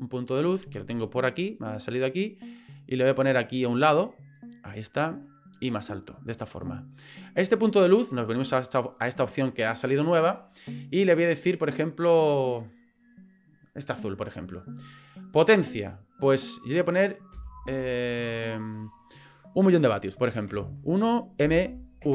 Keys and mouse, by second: 2.2 click, 3.8 click, 4.7-5.2 middle drag, 5.7 click, 6.6-7.0 middle drag, 11.0 click, 15.6-22.1 drag.